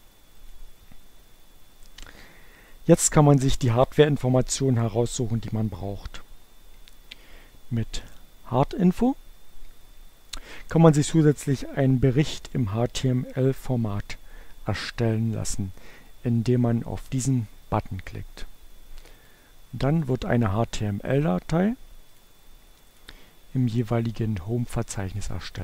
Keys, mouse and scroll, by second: 0.6 click, 19.3 click, 20.0 click, 22.3 click, 23.1 click.